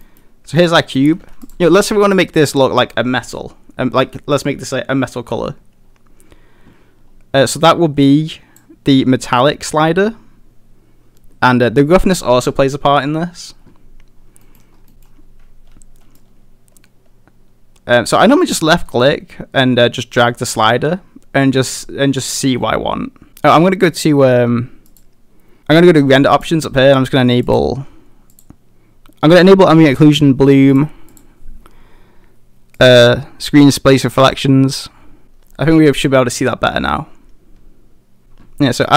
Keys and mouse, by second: 0.0 middle drag, 0.8 middle drag, 1.1 a, 1.2 a, 8.1 click, 14.4 middle drag, 14.9 middle click, 16.2-23.3 drag, 16.9-18.7 middle drag, 18.8-22.4 middle drag, 23.9 click, 24.9 click, 27.6 click, 28.4 click, 30.7 click, 31.1 click, 32.8 click, 36.1-38.2 drag.